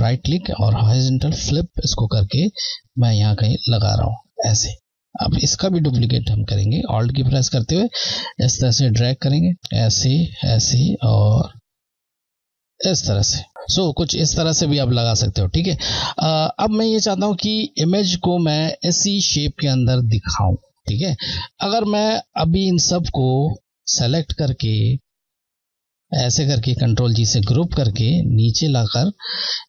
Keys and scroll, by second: 1.0 Left, 2.2 Left, 7.4 Left, 9.6 Left, 11.0 Left, 18.5 Left, 23.0 Left, 26.1 shift+Left, 27.6 ctrl+g.